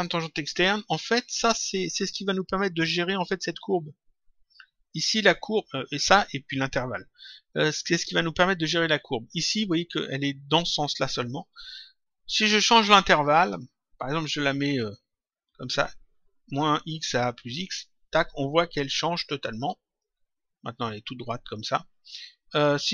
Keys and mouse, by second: 13.3 click, 17.5 click, 19.9 click.